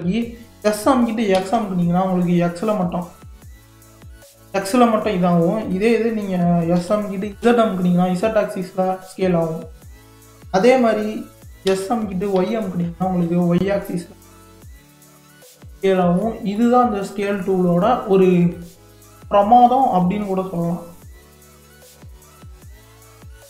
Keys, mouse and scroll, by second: 15.8-16.2 middle drag, 16.2-16.6 scroll down 1, 16.6-18.6 middle drag, 18.6 click, 20.5 click, 22.8 Delete.